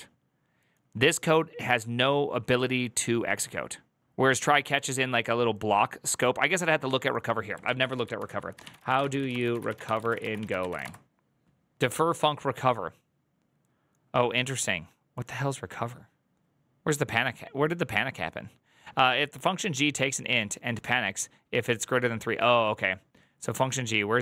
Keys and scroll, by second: 7.6 alt++, 8.1 ctrl+t, 8.2-12.2 typing.